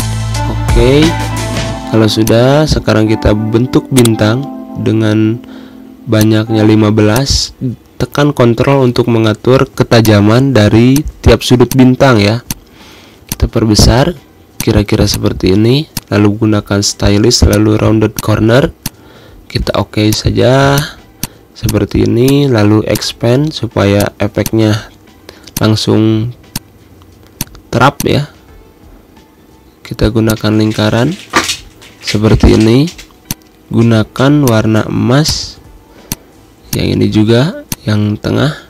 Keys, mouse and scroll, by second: 2.0-3.7 drag, 4.9 typing, 5.9 click, 6.4 ctrl+z, 6.8-11.1 drag, 11.1 ctrl+z, 11.4-14.1 drag, 14.1 z, 14.3 click, 14.7 space, 14.8 click, 15.0 space, 15.7 click, 20.1 a, 20.5 click, 21.1 z, 21.4 click, 24.3 space, 24.6 click, 24.7 space, 25.3 click, 25.7 Pause, 26.3 click, 26.4 space, 27.1-30.0 drag, 30.2-33.0 drag, 34.4 i, 35.0 click, 38.3 g.